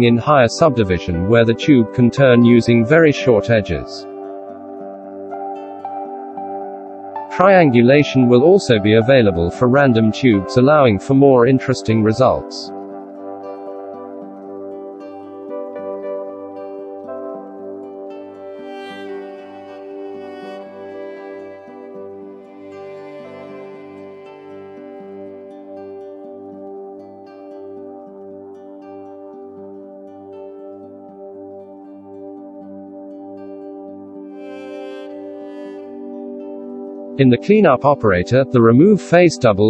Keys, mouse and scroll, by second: 32.2 ctrl+z, 32.8 shift+q.